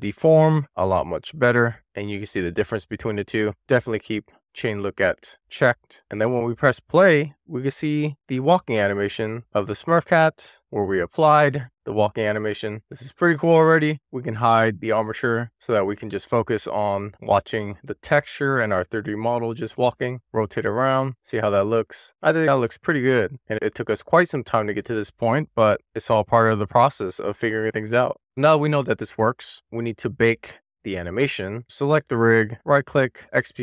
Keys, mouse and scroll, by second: 0.1 shift+middle click, 0.8-1.2 scroll up 1, 2.8 click, 3.9 scroll down 1, 4.2-5.8 middle drag, 5.8 scroll up 1, 5.9 click, 8.3-8.9 scroll up 2, 8.9-11.3 middle drag, 11.3-11.7 scroll down 1, 11.7 scroll up 1, 11.8-13.5 middle drag, 13.5-13.8 scroll down 1, 14.6 click, 18.5 click, 19.1 click, 19.6-25.4 middle drag, 25.8-26.4 middle drag, 26.7-27.5 middle drag, 27.7-29.5 middle drag, 31.6 click, 33.1-33.6 right drag.